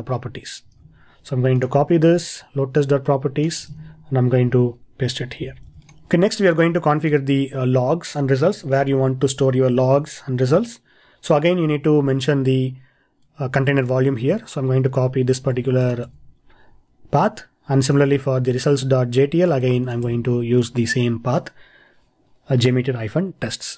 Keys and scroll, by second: 0.8 super+Tab, 3.7 super+Tab, 5.7 super+v, 15.6 super+c, 16.1 super+v, 19.6 super+c, 20.0 super+v.